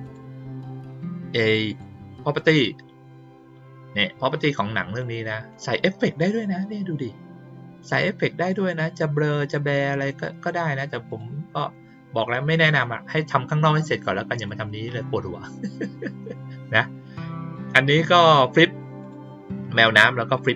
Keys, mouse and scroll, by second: 0.0 click, 1.6 click, 4.4-4.9 drag, 5.4 right click, 11.0 click, 14.3 click, 19.0 click, 20.3 click.